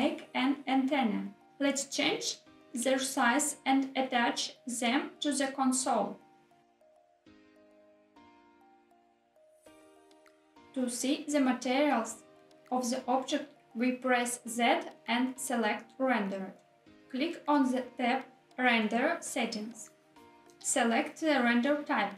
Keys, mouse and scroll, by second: 0.2 click, 0.4 shift+a, 0.8 g, 1.2 click, 1.2 z, 1.7 s, 2.2 click, 2.8 click, 3.1-4.5 typing, 3.4 click, 4.4 click, 5.8 click, 6.2 click, 6.2 s, 6.4 g, 6.4 z, 7.1 click, 7.2 click, 7.2 right click, 8.4 click, 8.7 shift+click, 8.9 s, 9.4 click, 9.6 g, 9.6 z, 10.5 click, 10.7 z, 19.2 click, 21.6-22.1 drag.